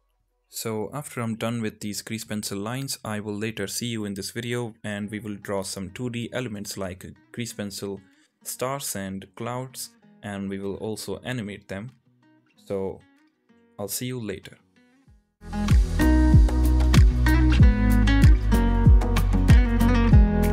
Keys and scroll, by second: 4.7 ctrl+z, 6.0 ctrl+z, 14.1 ctrl+z, 20.3 ctrl+z.